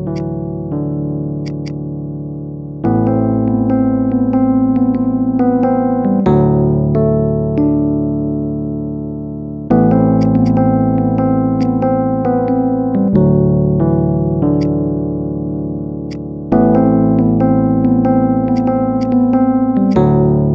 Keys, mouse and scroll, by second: 1.3 click, 1.5 click, 10.1 click, 10.3 click, 10.7 Delete, 11.3 shift+a, 14.8 shift+middle click, 14.9-15.3 scroll down 2, 15.3 shift+middle click, 15.5-15.9 scroll down 1, 15.9 shift+a, 18.9 click, 19.7 click.